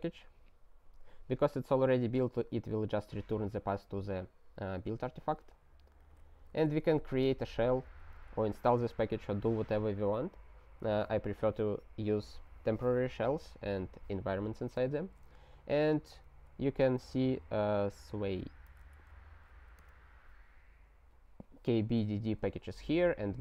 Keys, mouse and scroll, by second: 5.0 alt+w, 6.0 click, 6.2 ctrl+a, 6.4 ctrl+space, 6.5 ctrl+e, 6.9 alt+w, 7.3 Return, 7.8 ctrl+y, 8.3 Return, 15.5-17.0 typing, 18.2-19.2 typing, 19.8 alt+h.